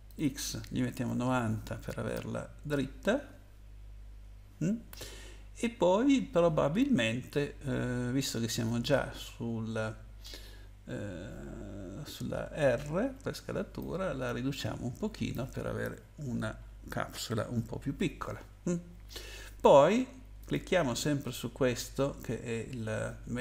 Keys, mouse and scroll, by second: 0.0 click, 0.8-1.7 typing, 2.6 Return, 13.0 r, 13.8 click, 16.0-16.5 scroll up 1, 16.5-17.1 scroll up 2, 20.4 click.